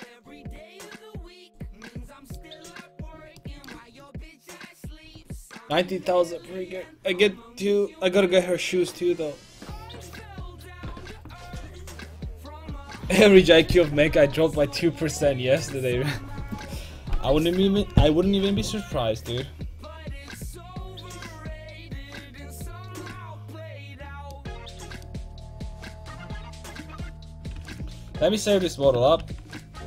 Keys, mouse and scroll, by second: 0.6 Tab, 2.1-3.1 drag, 27.6 ctrl+s, 29.2 ctrl+n.